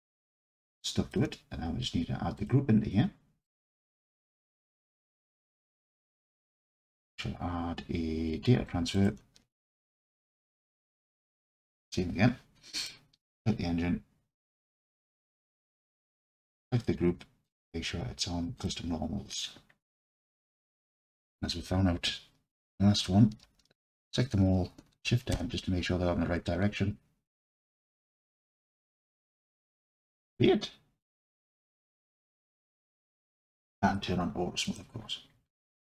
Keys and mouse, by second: 0.5-1.1 alt+drag, 2.4-3.5 drag, 4.2-5.9 alt+drag, 6.8-9.0 drag, 11.4 click, 15.2-16.3 drag, 18.6 click, 21.2 Tab, 23.4 a, 25.3 shift+n, 33.3-34.7 drag, 35.7 alt+click.